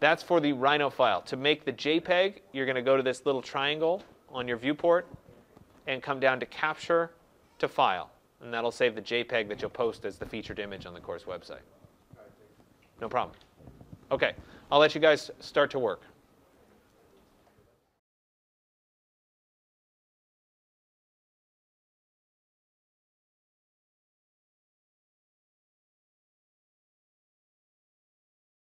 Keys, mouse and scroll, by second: 0.8 click, 4.9 click, 16.5 click.